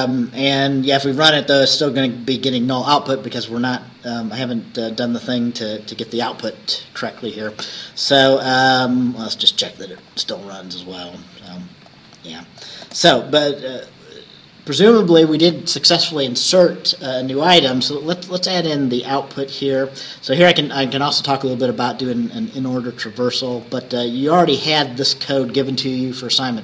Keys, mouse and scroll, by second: 10.1 click, 11.9-13.5 drag, 12.9 space, 18.7-20.4 scroll up 8, 23.7 click, 24.6 click, 25.2-25.9 scroll up 2.